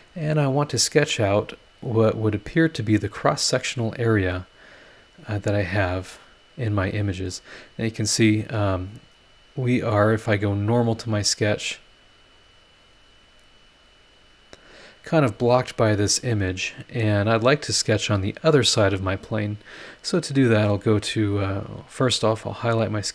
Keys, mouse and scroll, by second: 1.3 click, 2.5 scroll down 1, 3.1-3.4 scroll up 1, 3.5 scroll down 1, 4.9 click, 5.3 scroll down 2, 5.7-6.0 scroll up 2, 6.1-10.1 middle drag, 6.2-10.1 right drag, 10.9 click, 12.4 click, 13.8 click, 14.9-15.3 scroll up 2, 20.6 click, 22.1 scroll down 2, 23.0 click.